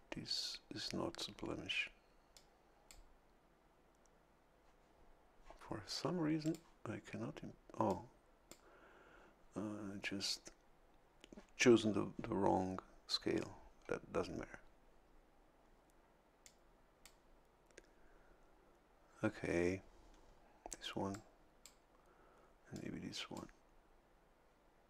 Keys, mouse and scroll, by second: 2.3 click, 6.4 click, 7.8 click, 16.4 click, 21.1 click, 22.7 click.